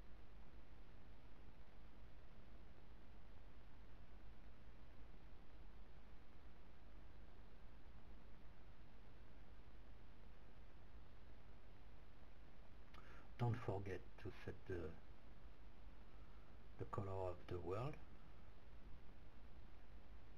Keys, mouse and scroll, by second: 1.3 click, 2.2 r, 6.5-8.4 right drag, 7.5 r, 11.0 click, 18.1 click.